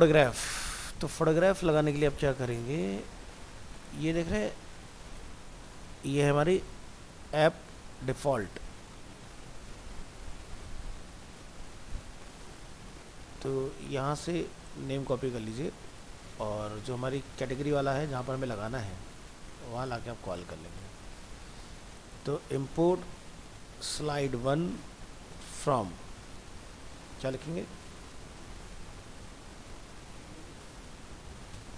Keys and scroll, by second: 15.1 ctrl+c, 20.8 ctrl+v.